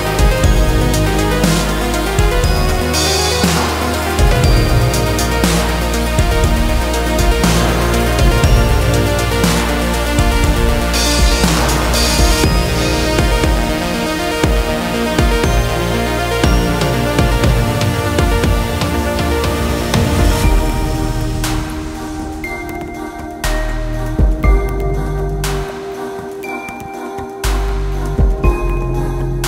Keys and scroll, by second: 0.9 Escape, 3.0 c, 7.3 shift+Page_Up, 10.6 Escape, 14.3 space, 17.4 c, 24.8 space.